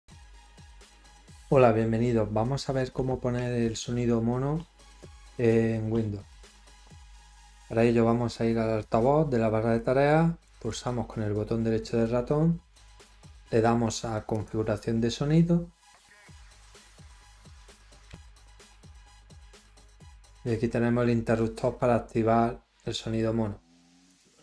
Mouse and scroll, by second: 10.4 right click, 14.3 click, 19.6 scroll, 19.7 scroll up 2, 24.1 click.